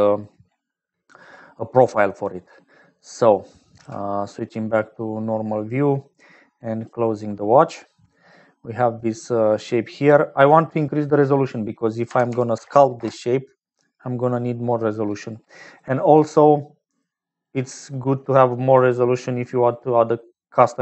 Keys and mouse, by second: 8.2 click, 10.4-13.7 drag, 14.3 right click, 15.5 click, 17.2 right click, 19.3 click, 20.3 right click.